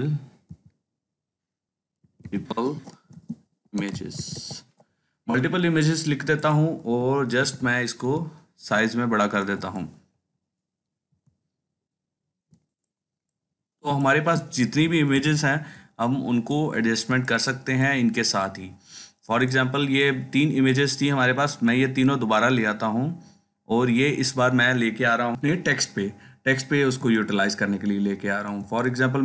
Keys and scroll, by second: 0.0-0.4 typing, 1.6-5.1 typing, 7.3 ctrl+t, 15.0 ctrl+t.